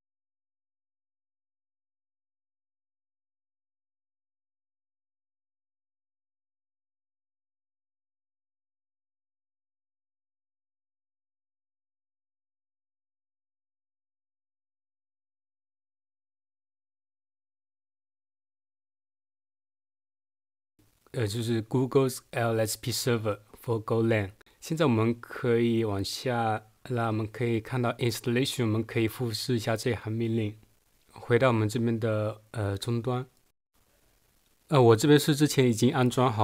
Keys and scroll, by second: 0.0-0.4 typing, 17.3 super+1, 17.6 super+2, 24.4 Right.